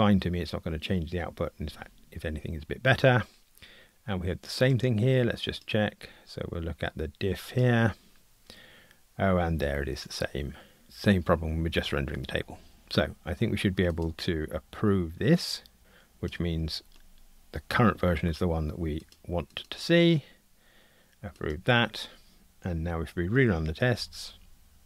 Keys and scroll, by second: 16.5 super+F11, 24.3 ctrl+r.